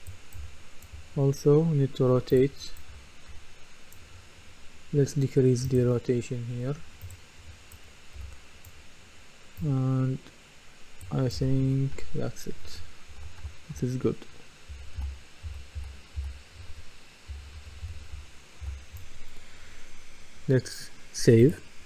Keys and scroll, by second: 0.4 typing, 2.9-3.3 typing, 8.2 d, 11.1-15.0 typing, 18.3 typing.